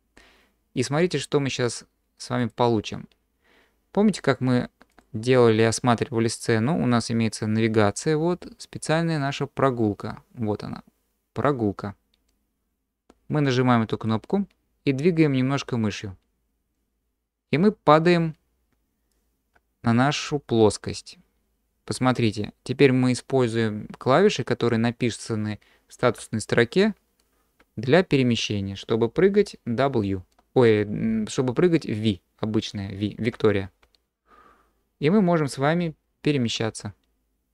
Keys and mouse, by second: 5.0-8.9 drag, 13.2-17.2 drag, 17.2 middle click, 17.3 click, 17.4-18.6 middle drag, 18.6-21.7 drag, 21.7 middle click, 22.3-37.5 drag.